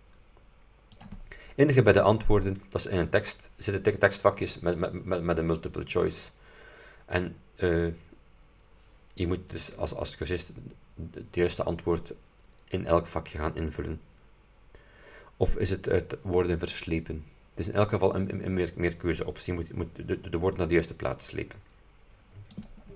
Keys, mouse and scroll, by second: 1.0 click, 22.7 click.